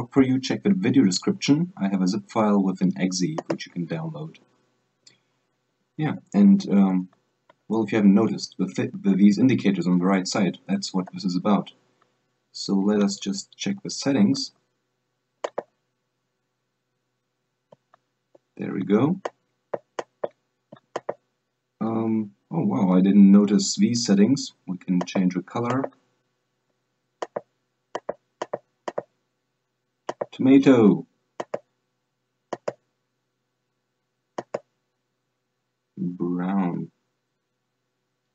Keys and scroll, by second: 1.6 alt+space, 3.5 alt+space, 5.8 super+Right, 6.5 super+Up, 7.1 super+Down, 7.7 super+Left, 8.4 super+Right, 8.9 super+Right, 9.3 super+Left, 9.6 super+Left, 11.2 super+Left.